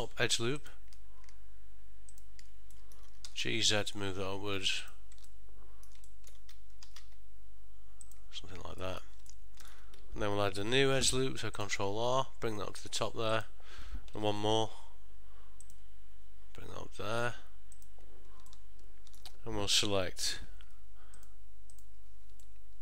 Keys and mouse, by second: 0.0 2, 0.7 alt+click, 2.9 middle click, 3.3 g, 5.4 ctrl+middle click, 6.2 shift+middle click, 7.0 g, 9.0 middle click, 9.4 ctrl+middle click, 11.2 ctrl+r, 18.6 ctrl+middle click, 20.8 2, 21.3 click, 21.8 click, 22.6 middle click.